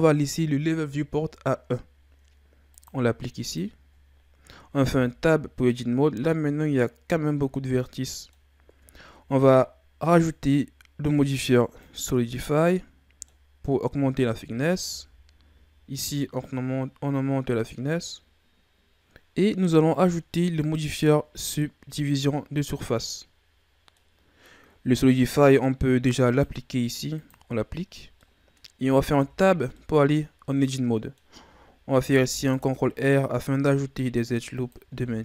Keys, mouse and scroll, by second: 2.7-4.6 drag, 4.6-4.9 scroll up 2, 4.9 Tab, 5.7-6.3 scroll down 2, 6.3-8.8 middle drag, 8.8 Tab, 10.0-12.7 drag, 12.7-13.6 middle drag, 13.6-14.9 scroll up 1, 14.9-17.9 drag, 18.9-19.9 middle drag, 19.9-23.1 drag, 23.1-26.2 middle drag, 26.3-28.2 drag, 28.2-29.2 middle drag, 29.2 Tab, 29.7-31.9 middle drag, 31.9 ctrl+r, 35.1 ctrl+r.